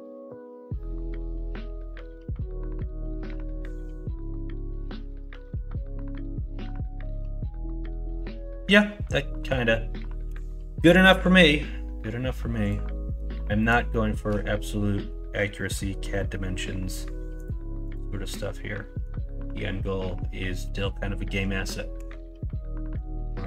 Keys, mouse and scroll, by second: 0.9 s, 2.7 g, 4.2 s, 4.8 g, 10.2 g, 13.9 shift+middle drag, 21.9 h.